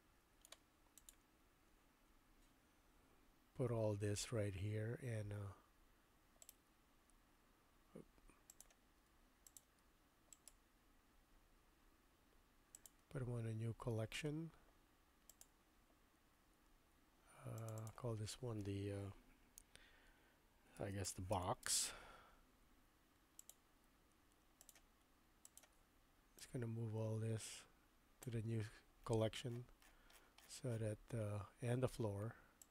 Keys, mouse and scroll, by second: 6.5-7.2 right drag, 8.5 click, 10.4-12.9 right drag, 15.4 click, 17.6 click, 18.7-22.6 shift+drag, 23.5 click, 25.4 shift+click, 26.4-28.3 drag, 32.6-32.7 drag.